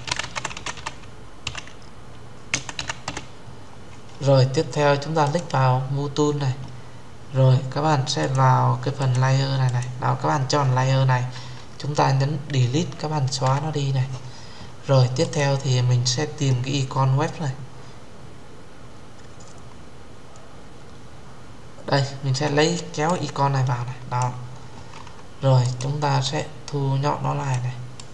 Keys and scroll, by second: 13.2 Delete.